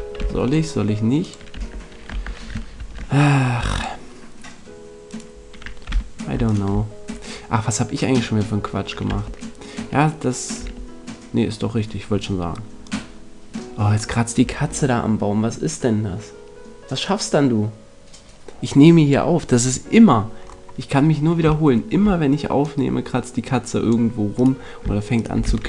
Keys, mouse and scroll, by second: 1.5 Tab, 2.0 Tab, 2.7 ctrl+Tab, 5.8 z, 9.0 Tab, 10.6 Tab, 12.8 click, 20.4-22.6 middle drag, 22.6 click, 24.3-25.6 right drag, 25.4 x.